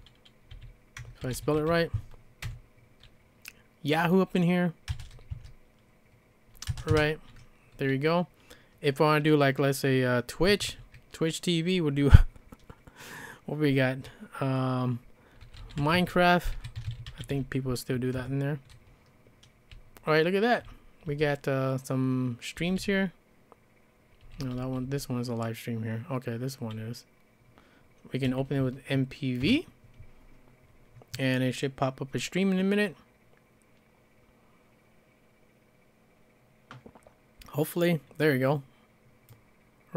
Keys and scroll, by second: 0.0-2.9 typing, 4.6-7.4 typing, 10.2-11.2 typing, 15.2-17.8 typing, 18.2 Return, 19.7-25.3 typing, 28.2 e, 29.4 Return.